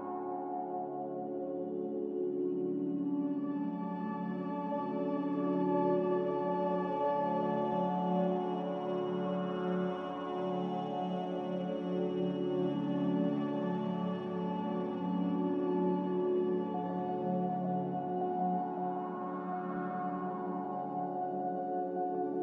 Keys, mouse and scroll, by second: 8.1 n, 18.7 a.